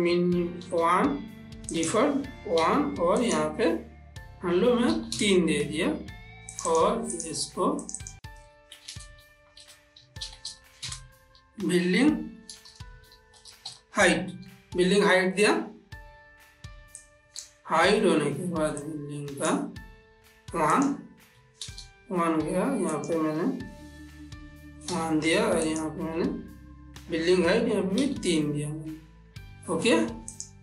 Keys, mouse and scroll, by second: 2.1 click, 3.6 click, 6.9 click, 9.2-11.2 typing, 13.0-14.0 typing, 17.6 click, 19.2-21.1 drag, 21.1 click, 23.3 click, 26.0 click.